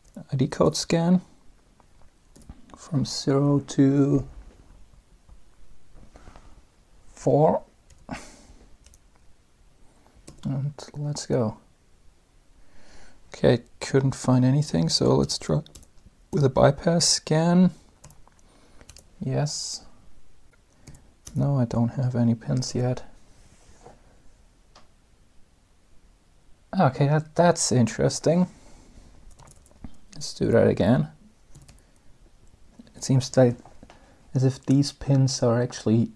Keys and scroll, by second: 0.4 Return, 2.1 Return, 7.7 4, 8.6 Return, 10.0 space, 15.0 b, 15.5 Return, 16.1 Return, 16.8 Return, 17.8 y, 18.6 Return, 20.2-21.2 typing, 22.5 space, 29.2 b, 29.4 Return.